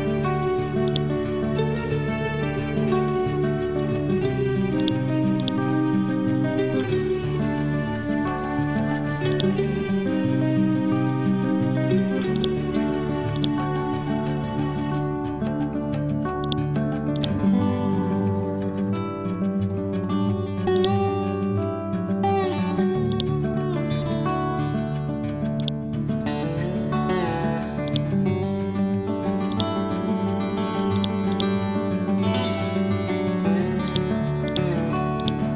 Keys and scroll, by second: 2.3 Right, 15.2 ctrl+End, 32.3 Down.